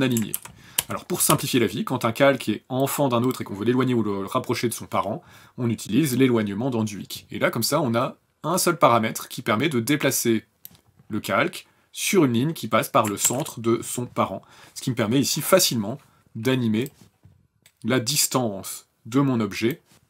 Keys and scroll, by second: 0.3 ctrl+z, 0.8 ctrl+z, 1.4 ctrl+z, 13.2 ctrl+z.